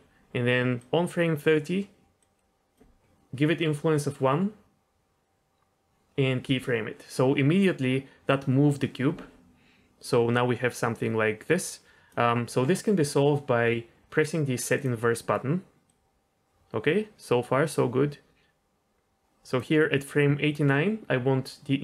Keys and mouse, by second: 0.7 click, 2.2 click, 6.4 i, 10.0-12.1 drag, 14.8 click, 15.8-19.5 drag.